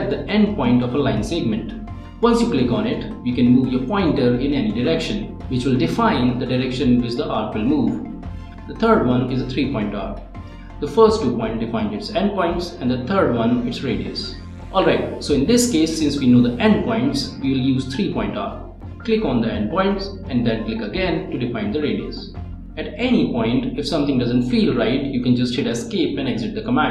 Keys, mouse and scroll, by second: 8.0 click, 9.6 click, 11.2-12.4 scroll down 1, 17.2 click, 19.9 Escape, 21.1 click, 23.0-23.5 scroll up 2.